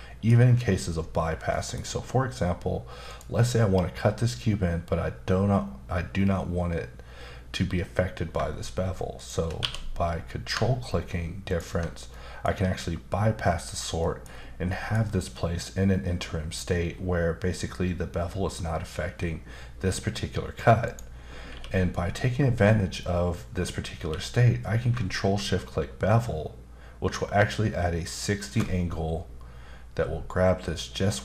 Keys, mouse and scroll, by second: 1.5 middle click, 3.1 click, 9.2 shift+click, 9.6 q, 11.5 ctrl+click, 12.1 middle click, 14.0 middle click, 14.3-14.7 scroll up 2, 14.7 middle click, 20.8 click, 21.5 q, 24.0 q, 28.5 ctrl+shift+click.